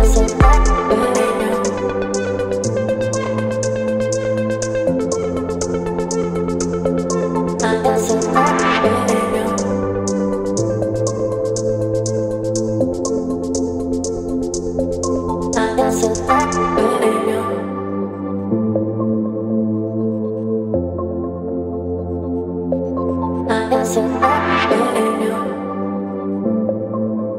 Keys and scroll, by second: 1.4 ctrl+BackSpace, 2.2 v, 4.1 Delete, 4.8 space, 6.1 space, 7.6 Delete, 9.5 ctrl+BackSpace, 10.9 Delete, 11.3 space, 12.6 space, 13.9 Delete, 15.6 Delete, 16.3 space, 16.8 space, 19.6 space, 23.0 ctrl+BackSpace, 23.5 ctrl+d, 24.4 Delete, 27.2 Delete.